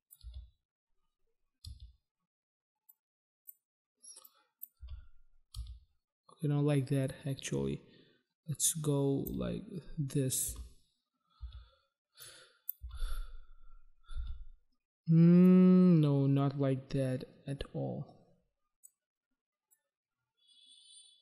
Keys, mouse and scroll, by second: 0.3 space, 1.7 space, 2.9 click, 4.3 click, 4.9 space, 5.6 space, 7.1 click, 9.3 space, 10.5 space, 11.4 space, 12.2 click, 12.8 space, 14.2 space, 15.6 space, 18.9 click, 19.6 click.